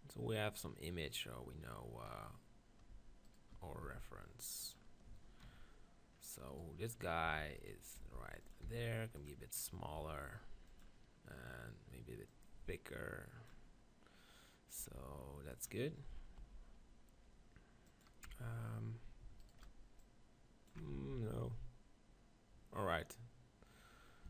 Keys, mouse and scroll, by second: 1.6-3.3 middle drag, 3.3-4.7 right drag, 3.8 g, 4.7 middle click, 5.3-6.4 drag, 6.4 middle click, 7.0-12.6 right drag, 7.3 b, 8.0 g, 8.5 click, 8.6 s, 9.6 click, 10.1 g, 10.8-14.1 drag, 14.1 middle click, 14.8 g, 15.7 click, 16.4 g, 18.3 Tab, 19.4-21.4 right drag, 20.0-21.1 drag, 20.9 ctrl+z, 21.4 click.